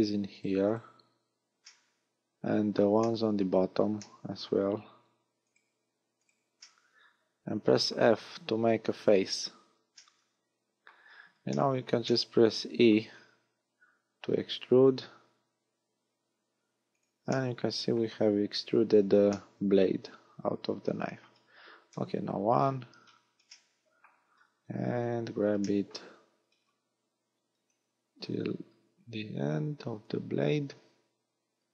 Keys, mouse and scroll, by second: 0.3 shift+right click, 0.7 shift+right click, 1.7 middle click, 3.1 shift+middle click, 4.0 shift+middle click, 5.5 shift+right click, 6.2 shift+right click, 6.7 middle click, 8.1-8.5 scroll down 3, 9.3 f, 9.9 middle click, 11.0 scroll down 2, 11.5 shift+middle click, 12.1 middle click, 13.1-13.5 scroll down 4, 14.5 e, 17.0 click, 17.3 middle click, 18.3-18.9 scroll up 8, 19.3 middle click, 21.9 KP_1, 22.5-23.5 scroll down 11, 23.5 shift+middle click, 24.5-24.9 scroll up 5, 25.7 shift+middle click, 26.5 scroll down 3, 27.7 click.